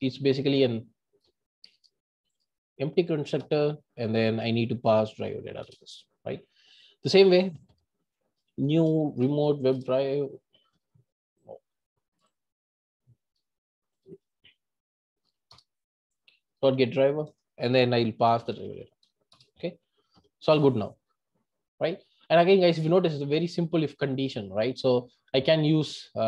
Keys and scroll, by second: 9.8 Return, 13.4 Delete, 16.2 Return, 19.4 Return.